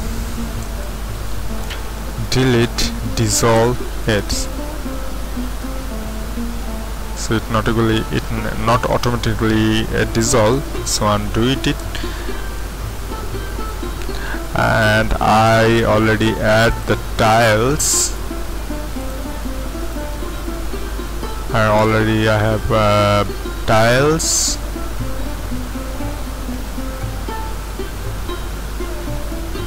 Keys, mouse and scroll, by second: 1.7 x, 4.0-5.4 middle drag, 6.3-10.6 middle drag, 10.6 ctrl+z, 11.8 Tab, 17.1 z, 25.4 ctrl+Up, 27.4 middle click, 28.0 middle click, 28.4 middle click, 28.6 middle click.